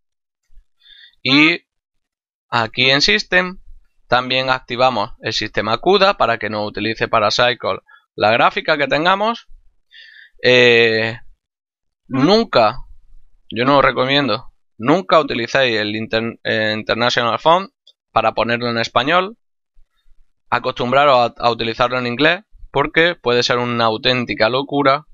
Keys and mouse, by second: 1.1 middle click, 2.7 click, 3.8 middle click, 5.1 click, 15.6 click, 16.1 middle click, 17.8 click, 21.2 click.